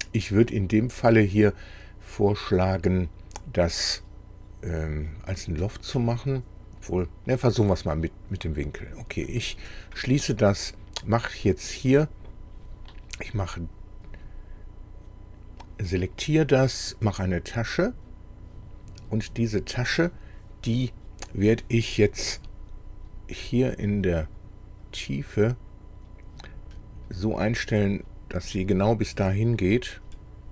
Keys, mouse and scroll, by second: 9.3 click, 15.7 click, 17.7 click, 24.3 click, 24.9 click, 25.6 click, 26.7-27.1 scroll up 1, 27.4-28.7 middle drag.